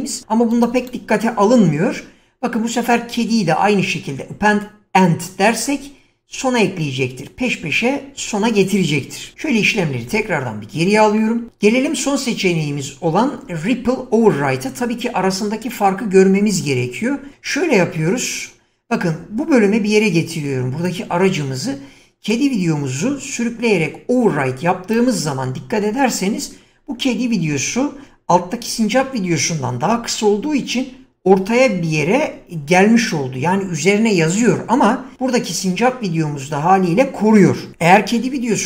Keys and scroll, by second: 0.9 <, 9.5 ctrl+z.